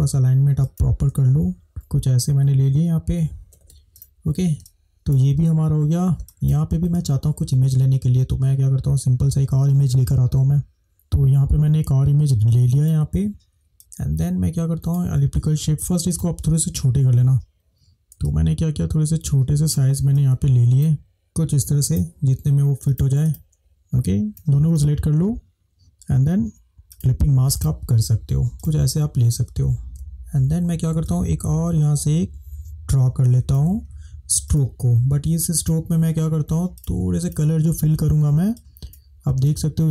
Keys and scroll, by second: 1.7 Up, 4.5 space, 10.8 ctrl+-, 39.5 space.